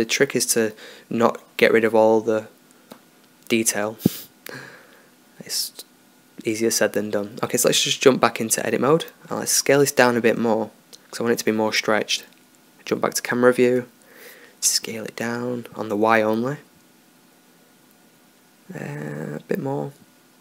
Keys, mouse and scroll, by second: 3.4-4.5 drag, 4.5 middle click, 4.6-5.1 drag, 7.1 Tab, 8.4 s, 13.0 KP_0, 15.1 s.